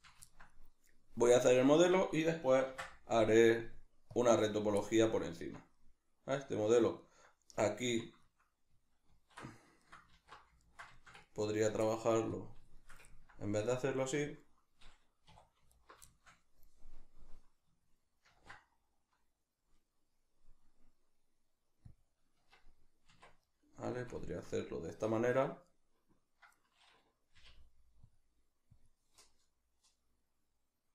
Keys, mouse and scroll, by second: 2.7 ctrl+r, 4.5 right click, 4.8-12.3 middle drag, 5.4 Tab, 7.9 Tab, 9.1 alt+q, 10.1 alt+q, 12.3 click, 12.7-15.7 shift+middle drag, 15.3 2, 15.7 alt+right click, 16.1-22.0 shift+middle drag, 18.3 ctrl+b, 22.0 click, 22.3 Tab, 23.4-30.9 middle drag, 27.3 k.